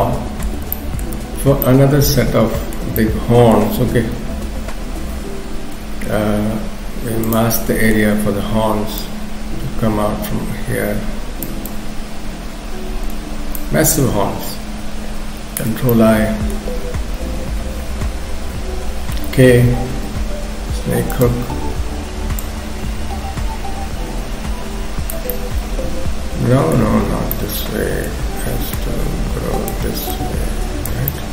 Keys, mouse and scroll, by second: 0.0 middle click, 0.8 shift+middle click, 1.2-1.6 scroll up 2, 1.6 middle click, 3.0 middle click, 4.0 m, 5.8 f, 7.6 middle click, 8.1-8.8 scroll up 2, 9.0 click, 11.7 click, 15.4 ctrl+i, 15.9 middle click, 16.7-17.2 scroll down 1, 17.2 KP_3, 17.9-18.5 scroll down 2, 19.3 k, 20.0 f, 22.4 click, 25.3 middle click, 27.0 ctrl+z, 27.3 middle click, 28.8 click, 30.1 click, 31.1 middle click.